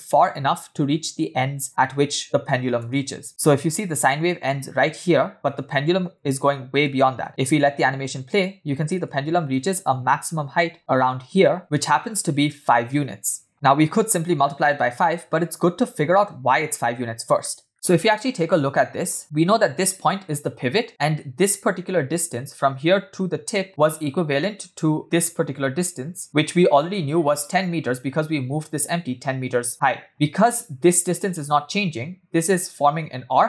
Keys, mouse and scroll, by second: 2.8 KP_1, 3.4-3.8 scroll up 2, 6.8 space, 7.2 space, 7.3 space, 8.9 space, 10.1 Left, 10.4-11.6 Left, 14.1-15.4 scroll down 2, 15.4 scroll down 2, 15.6 scroll up 1, 15.6 scroll down 1, 16.9-17.3 scroll down 2, 17.4 shift+middle drag, 17.7 e, 19.2 click, 20.9-23.7 drag, 25.0-26.2 drag, 27.0 click, 27.5 click, 30.4 click.